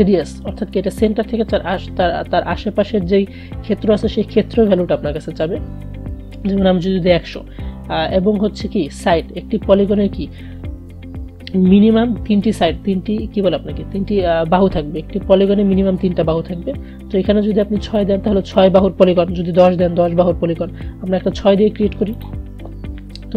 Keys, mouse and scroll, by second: 4.8-7.8 drag, 8.2 BackSpace, 9.2 click, 17.7-20.7 drag, 22.3 click.